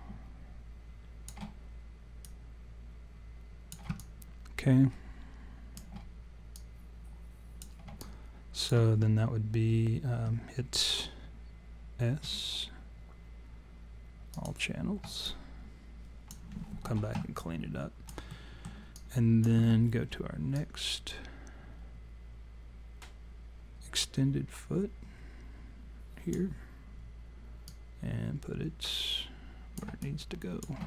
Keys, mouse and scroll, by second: 2.2 click, 4.0 alt+click, 6.6 click, 8.0 alt+click, 12.2 s, 15.3 alt+click, 17.4 alt+click, 18.3 alt+middle click, 19.0 alt+click, 20.6 click, 27.7 click, 30.0 alt+click.